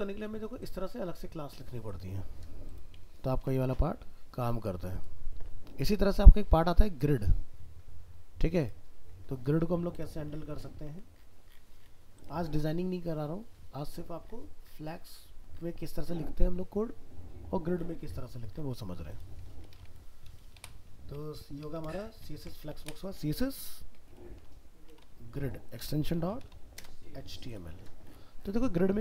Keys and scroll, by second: 3.3 ctrl+w, 19.7 alt+f, 22.2 ctrl+shift+Left.